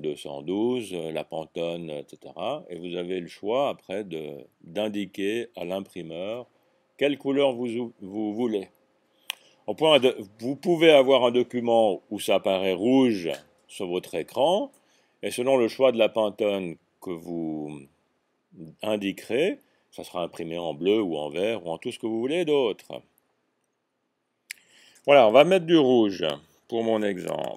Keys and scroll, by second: 27.4-27.5 typing.